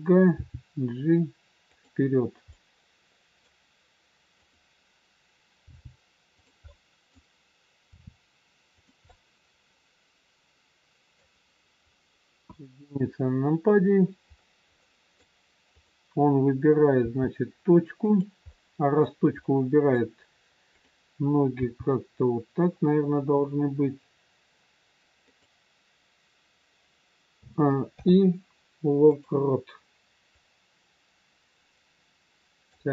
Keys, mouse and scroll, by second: 0.3 g, 2.5 middle click, 4.4 click, 5.6 g, 6.6 middle click, 7.8 r, 9.0 middle click, 11.8 scroll down 1, 12.3 KP_1, 14.3-14.7 scroll up 2, 14.7 middle click, 15.7 click, 16.9 g, 18.4 middle click, 19.9 middle click, 20.7 click, 21.6 g, 27.5 a, 28.0 i, 30.3 click.